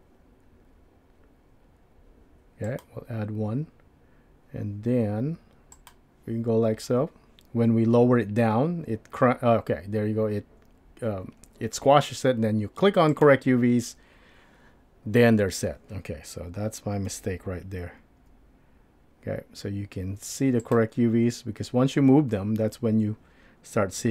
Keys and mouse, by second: 13.1 click, 17.1 g.